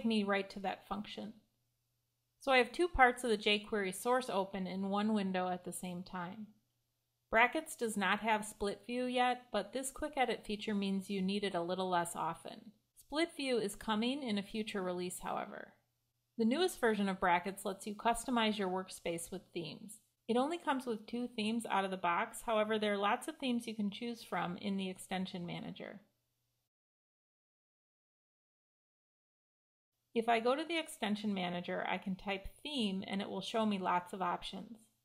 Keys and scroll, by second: 16.4 Escape.